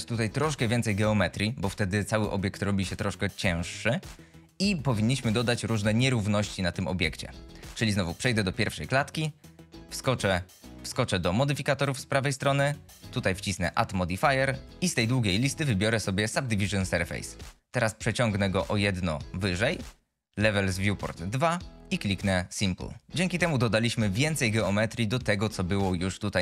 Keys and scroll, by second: 8.5 shift+Left, 13.1 F22, 24.1 F22.